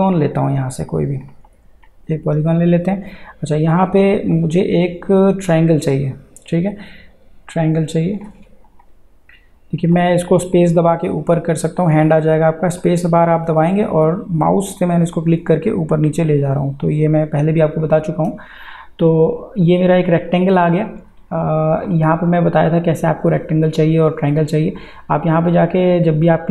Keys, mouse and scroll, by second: 4.3-8.3 drag, 8.3 space, 8.9 space, 10.2 space, 10.5 click, 10.6 space, 11.0 space, 11.7 click, 12.8 click, 13.3 space, 14.1 space, 21.0 click, 26.3-26.5 drag.